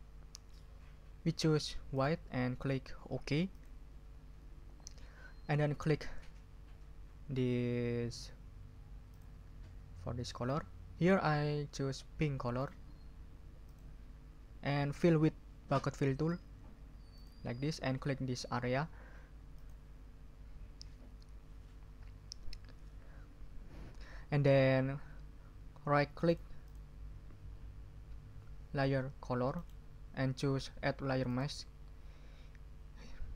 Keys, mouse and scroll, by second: 1.9 click, 3.5 click, 9.1 click, 10.5 click, 12.5 click, 13.6 click, 17.1 click, 19.5 click, 26.3 click, 26.6 click, 29.5 right click, 31.3 click.